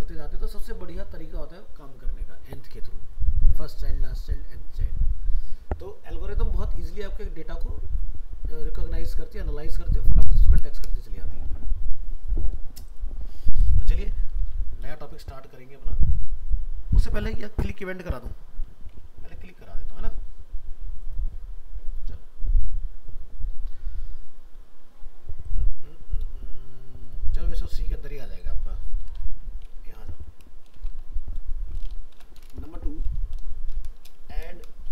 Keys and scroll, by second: 14.3 alt+f, 14.4 alt+移, 30.9 alt+Up, 32.1 ctrl+shift+n.